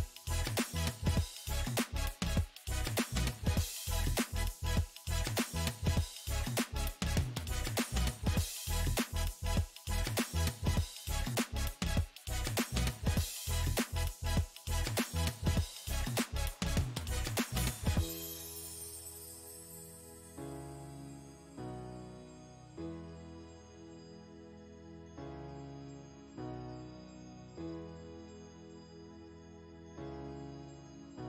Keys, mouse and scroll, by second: 2.5 middle click, 2.9-5.1 drag, 5.1 middle click, 5.7-7.3 shift+drag, 7.3-8.7 middle drag, 8.7-15.4 drag, 15.4-18.0 middle drag, 18.0-23.1 drag, 23.1-24.1 middle drag, 24.1 shift+click, 24.8 middle click, 25.7-28.9 drag, 28.9 middle click, 29.6 click, 30.5 middle click.